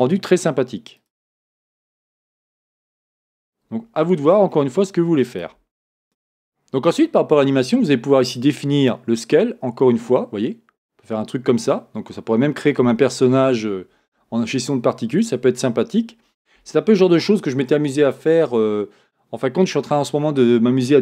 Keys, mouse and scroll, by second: 1.0-4.2 drag, 5.3 click, 6.0 click, 8.9-21.0 drag.